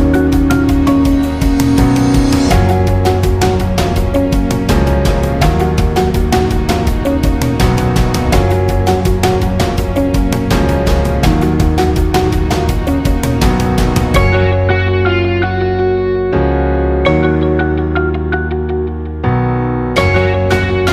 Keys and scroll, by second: 14.4-14.9 space, 16.4-17.0 space.